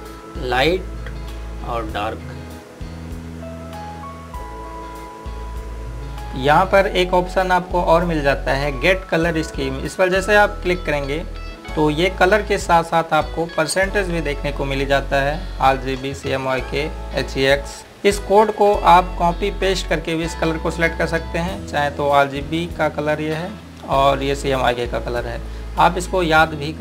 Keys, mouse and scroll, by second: 11.5 click, 12.7 scroll down 1, 17.8 click, 23.3 click.